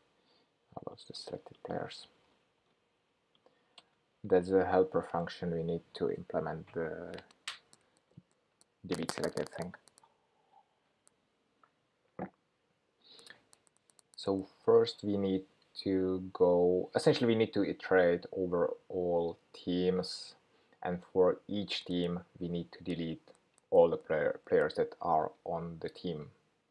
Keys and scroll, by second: 2.3 super+c, 4.3 super+v.